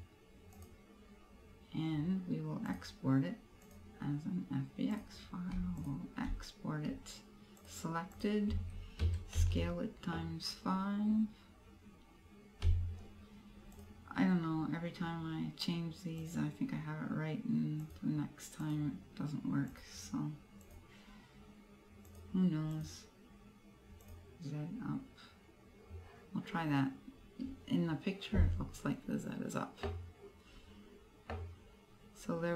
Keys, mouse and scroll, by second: 0.6 click.